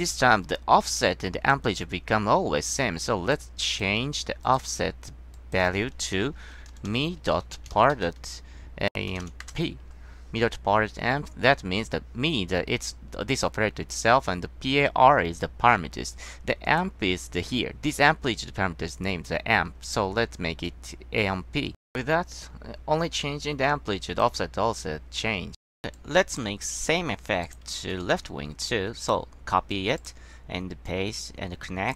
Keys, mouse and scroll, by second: 3.8 click, 7.0 s, 7.3 ,, 9.6 Return, 16.8 click, 26.9 scroll down 1, 27.6 click, 27.9 ctrl+c, 28.2 ctrl+v, 28.8-29.3 drag, 30.1 click, 31.0-31.9 drag.